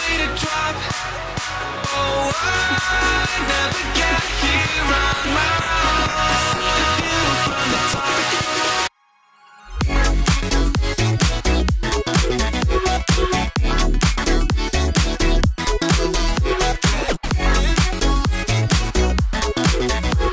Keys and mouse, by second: 0.1 s, 1.6 alt+click, 1.9 s, 4.3 `, 5.5 alt+click, 6.8-7.9 drag, 8.5 alt+click, 9.2-10.4 drag, 11.0 alt+click, 12.0 s, 13.5 middle click, 13.6 shift+click, 15.0 click, 16.2 c, 17.3-18.7 drag, 19.1-20.3 shift+drag.